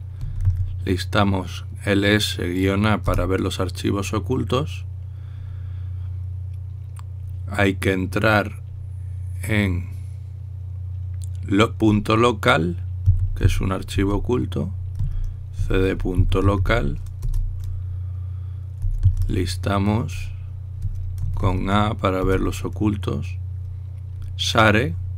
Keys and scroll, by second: 0.9 typing, 3.9 Return, 14.0-17.8 typing, 18.0 Return, 19.2-20.0 typing, 21.7-22.6 typing, 23.0 Return.